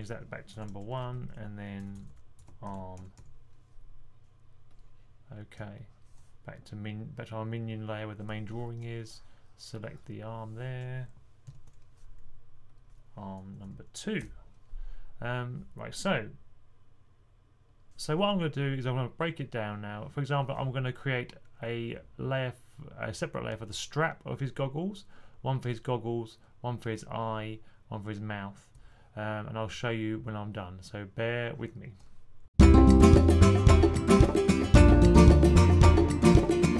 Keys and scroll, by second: 0.8 Right, 1.0 Right, 1.1 Right, 1.7 Right, 1.7-3.5 typing, 11.3 super+8, 13.5 2, 32.3 2, 33.3-35.4 typing, 34.8 super+8, 36.3 super+8, 36.5-36.7 typing.